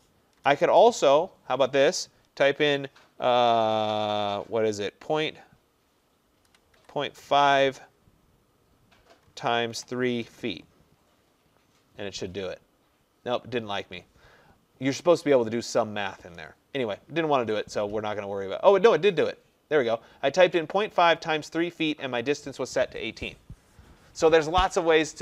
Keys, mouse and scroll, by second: 0.4-0.9 typing, 6.3-6.8 typing, 9.1-10.3 typing, 10.4 Return.